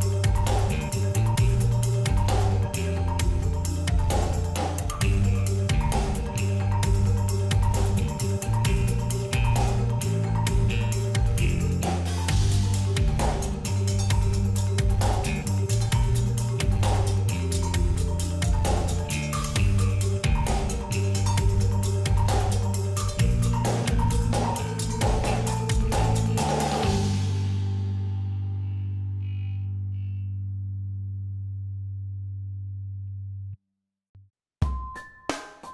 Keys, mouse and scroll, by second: 1.0 click, 11.3 alt+scroll down 1, 11.7 space, 11.8 click, 14.0 alt+scroll down 1, 14.5 click, 16.1 space, 16.2 click, 16.6 space, 17.2-20.3 drag, 22.4-33.4 drag, 32.0 shift+x, 35.3 click.